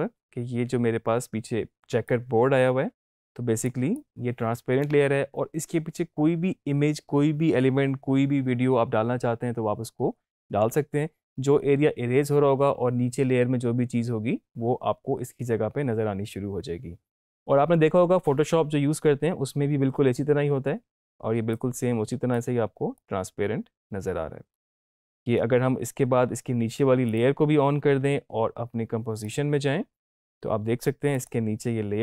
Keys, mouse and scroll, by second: 2.1-3.4 drag, 21.5-24.7 drag, 27.0 click, 29.3 click.